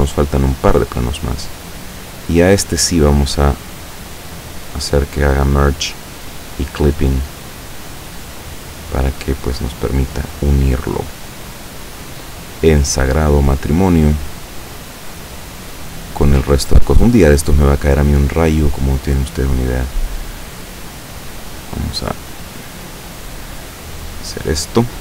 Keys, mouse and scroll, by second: 0.8-2.6 drag, 3.5 click, 4.0 click, 5.4-7.8 drag, 8.2-13.2 drag, 14.0 right click, 15.0-17.3 drag, 18.4 right click, 19.1-21.1 drag, 21.7 right click, 22.3-25.0 drag.